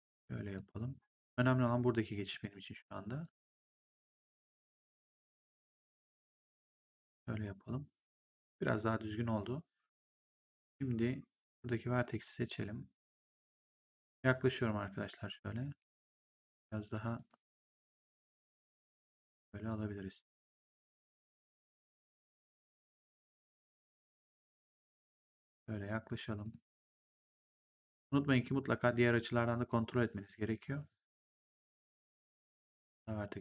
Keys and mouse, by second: 1.2 click, 5.7 click, 10.3 click, 11.5 click, 15.3 click, 15.3 g, 18.7 click, 22.1 click, 24.1 click, 26.3 click, 32.4 click.